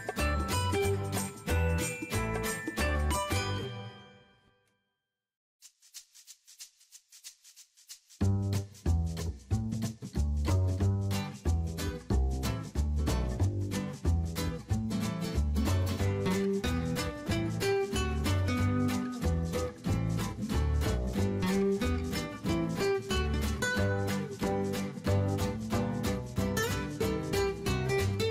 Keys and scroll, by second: 10.4 ctrl+x, 10.9 ctrl+shift+v, 19.6 ctrl+x, 20.0 ctrl+shift+v, 27.6 ctrl+g.